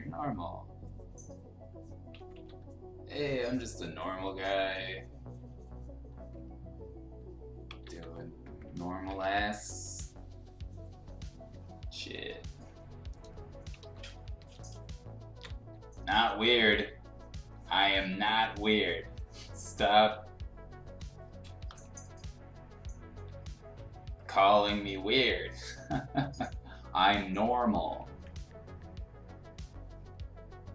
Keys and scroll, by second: 2.1 ctrl+z, 2.3 ctrl+z, 7.8 ctrl+z, 9.2 ctrl+z, 13.8-15.6 typing, 21.4 ], 23.1 [, 23.3 [.